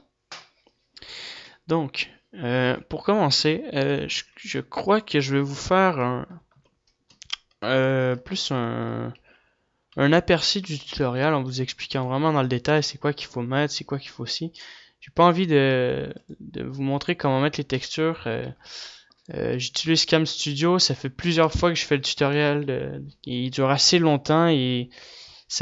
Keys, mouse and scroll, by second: 5.3 click, 6.2 KP_7, 6.8 KP_5, 7.1 KP_5, 9.7 shift+c, 10.9 ctrl+s, 11.7 ctrl+s, 12.8 ctrl+s, 17.4 ctrl+s, 20.2 ctrl+s, 20.2 KP_7.